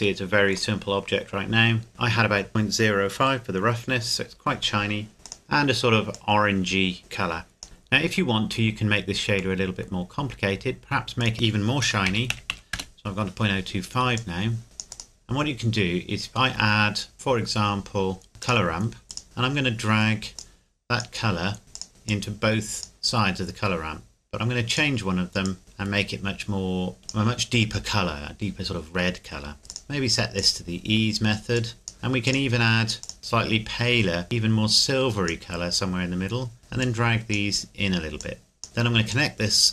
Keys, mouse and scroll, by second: 0.0 shift+middle click, 0.8-1.1 scroll up 1, 1.9 KP_Enter, 5.2 Caps_Lock, 5.2 click, 8.7-9.6 scroll down 1, 9.6 middle click, 11.2 click, 11.8 KP_Decimal, 12.1 KP_0, 12.3 KP_2, 12.5 KP_5, 12.7 KP_Enter, 14.2 click, 18.4 click, 20.4 click, 29.7 Caps_Lock, 29.7 click, 30.9-31.6 scroll up 1, 31.6 click.